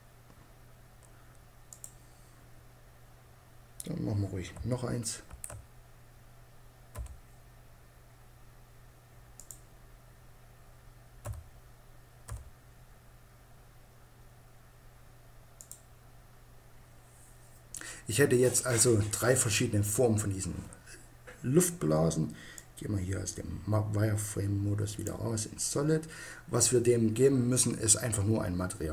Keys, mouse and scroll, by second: 1.3-2.9 drag, 2.9-4.7 middle drag, 4.7 shift+d, 8.9-10.6 drag, 10.6 s, 15.1-17.0 drag, 22.0-23.7 drag.